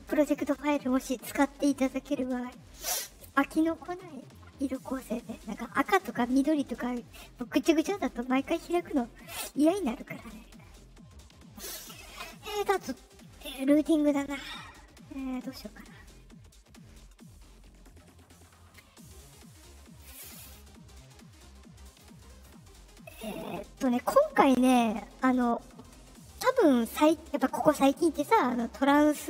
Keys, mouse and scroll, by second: 21.8 click.